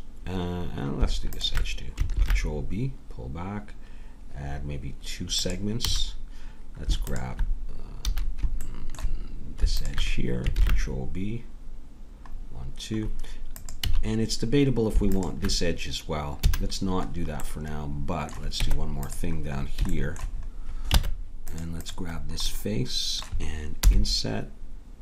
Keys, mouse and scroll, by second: 2.1 ctrl+b, 5.9 a, 7.1-8.7 drag, 8.0 a, 10.6 ctrl+b, 13.8 a, 16.4 a, 18.6 Tab, 21.0 ctrl+Tab, 22.2 click, 23.1 click, 23.8 i.